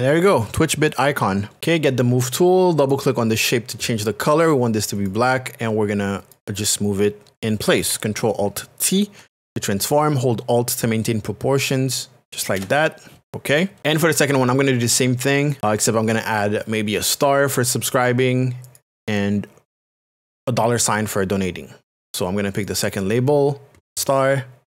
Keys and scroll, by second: 9.7 alt+t.